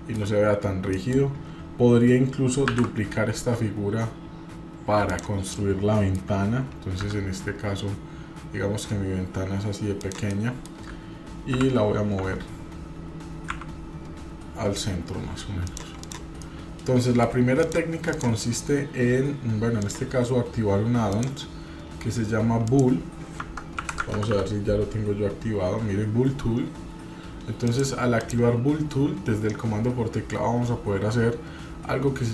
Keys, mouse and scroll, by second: 0.6-1.0 scroll down 2, 1.0 middle click, 2.7 shift+d, 5.5 middle click, 7.0 s, 10.3 middle click, 11.6 g, 16.0 click, 16.4-17.2 middle drag, 17.6 click, 18.1 click, 19.8-21.9 drag.